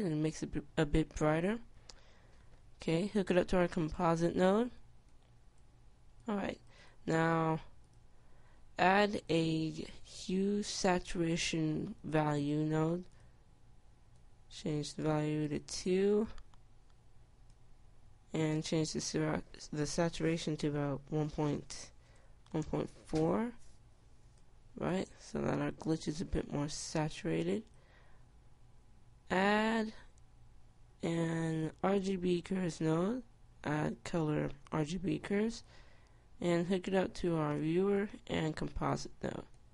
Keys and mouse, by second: 4.2-12.4 drag, 14.3-18.2 drag, 18.8-22.9 drag, 24.6 middle click, 25.4-30.6 drag, 35.0 click, 38.2-39.7 drag.